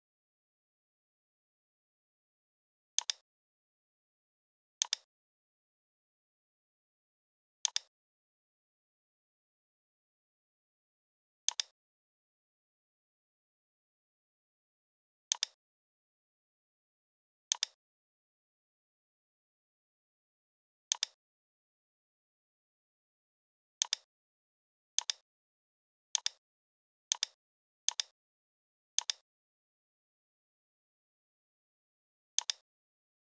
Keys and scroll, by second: 0.1 i, 3.9 v, 6.3 m, 16.2 a, 18.0 BackSpace.